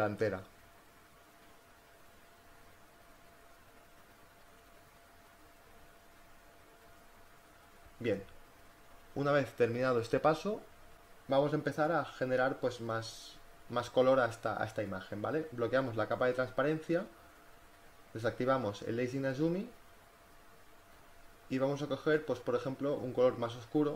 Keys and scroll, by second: 14.1 b, 17.0 space, 19.7 space.